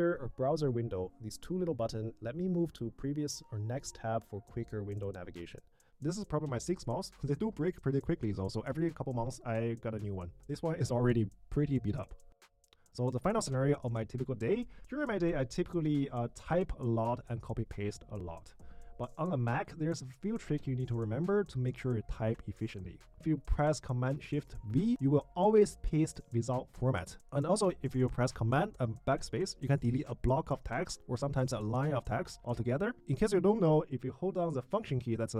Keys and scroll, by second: 0.0 Tab, 1.1 Tab, 1.8 Tab, 3.0 Tab, 3.6 Tab, 4.6 Tab.